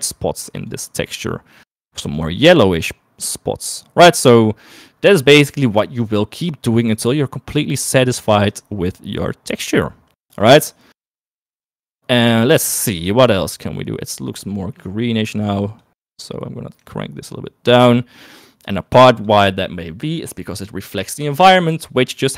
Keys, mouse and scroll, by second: 5.8 middle click, 7.0-8.9 drag, 9.2-10.9 drag, 11.6 click, 21.6 shift+middle click.